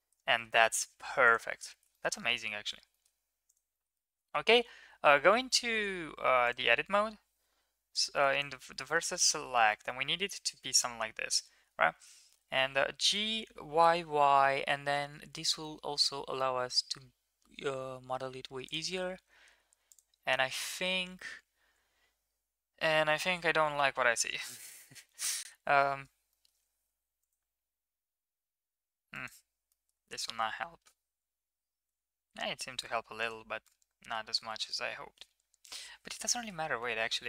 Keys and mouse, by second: 0.0 middle click, 0.3 middle click, 1.2 click, 1.5 ctrl+s, 1.9 shift+middle drag, 2.2 middle click, 2.9 shift+middle click, 3.7 middle click, 3.9 Tab, 4.2 shift+middle click, 4.9 KP_7, 7.5 1, 7.9-8.4 drag, 8.7 middle drag, 9.2 shift+middle drag, 9.7 shift+middle drag, 10.3 middle drag, 10.6-11.0 middle drag, 11.3 middle drag, 12.4 g, 19.9 click, 20.5 middle click, 23.7 Tab, 24.4 middle click, 24.7 click, 25.0 Tab, 25.4-25.8 middle drag, 26.3 middle click, 26.8 ctrl+r, 29.7 middle click, 30.4 ctrl+z, 32.1 Tab, 33.2 right click, 33.6-34.2 middle drag, 34.3 g, 36.3 middle click, 36.7 Tab.